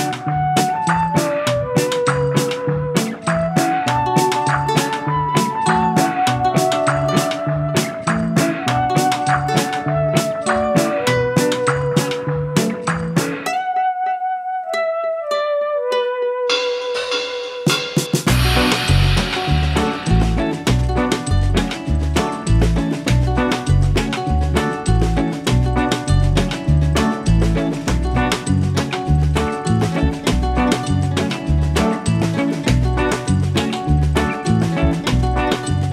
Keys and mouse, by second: 0.6 click, 1.6 v, 2.3 click, 4.6 right click, 5.8 click, 7.2 click, 9.1 click, 10.5 click, 14.1 shift+click, 14.5 t, 14.8 alt+click, 15.7 click, 16.1 Return, 16.5 click, 16.9 click, 17.6 shift+click, 18.1 click, 18.3 Escape, 18.8 click, 20.0 alt+click, 20.8 click, 21.4 Return, 21.7 click, 22.9 ctrl+u, 23.6 u, 33.2 click, 33.6 space, 33.7 click, 33.9 space, 34.3 click, 35.7 click.